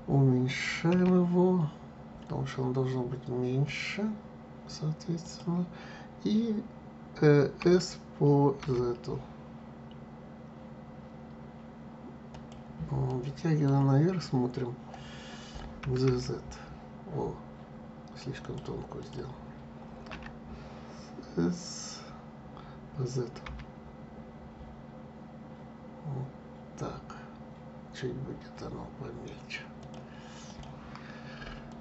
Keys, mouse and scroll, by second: 0.9 s, 7.6 s, 13.0-15.8 middle drag, 15.8 g, 19.0 click, 20.1 s, 30.4 click, 31.7 click.